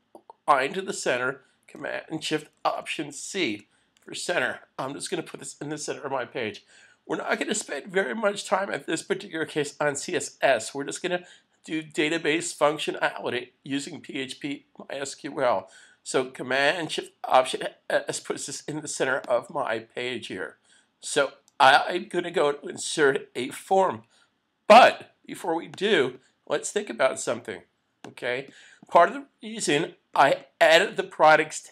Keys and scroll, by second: 3.6 alt+shift+super+c.